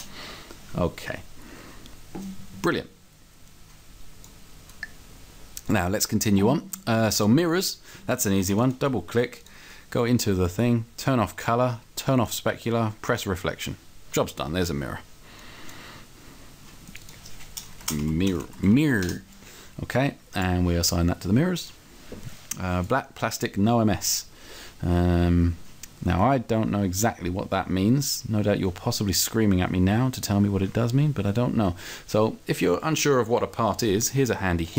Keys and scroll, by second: 17.8-18.9 typing, 19.1 Return.